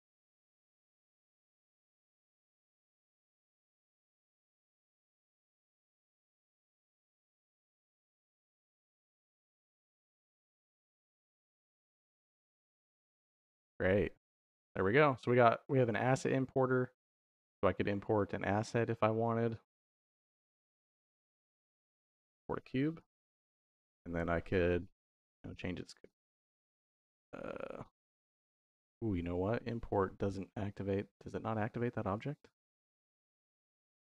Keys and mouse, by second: 0.4 shift+y, 2.1 click, 2.4 shift+y, 3.8 click, 4.2 shift+y, 5.8 shift+y, 7.6 click, 8.3 shift+y, 9.9 middle click, 10.4 middle click, 11.7 click, 15.1 middle click, 15.9 middle click, 18.0 middle click, 18.5 click, 19.3 ctrl+s, 20.3 middle click, 20.8 y, 22.9 g, 23.3 click, 24.4 shift+y, 25.9 middle click, 26.9 click, 32.6 shift+y.